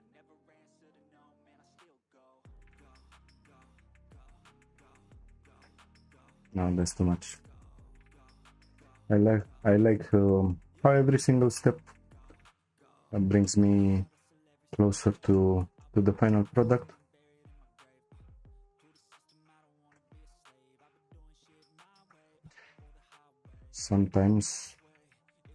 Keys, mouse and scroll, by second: 6.4 shift+click, 6.8 shift+click, 7.3 shift+click, 7.7 shift+click, 8.2 shift+click, 8.8 shift+click, 10.2-18.5 shift+middle drag, 18.5 c, 24.6 p.